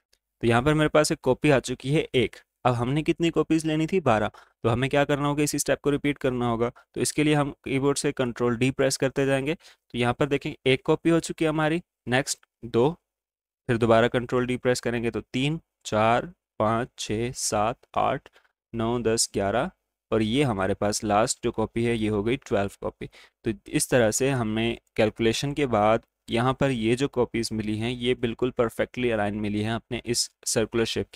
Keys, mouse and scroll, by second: 0.0 ctrl+d, 1.3 ctrl+z, 7.1 ctrl+z, 11.7 ctrl+d, 15.2 ctrl+d, 25.0 click.